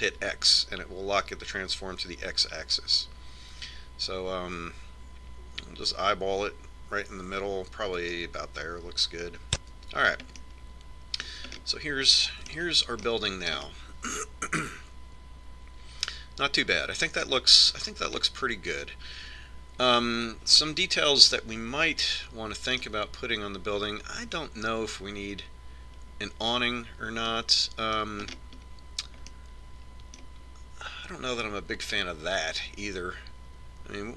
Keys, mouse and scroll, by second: 11.0 Tab, 11.8 middle click, 14.5-16.7 middle drag, 18.9-21.6 middle drag, 22.0-25.3 middle drag, 28.8-32.5 middle drag.